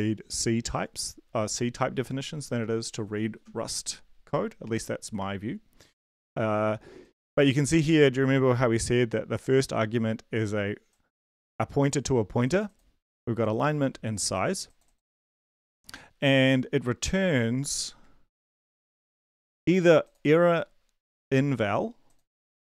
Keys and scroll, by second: 21.3 ctrl+c.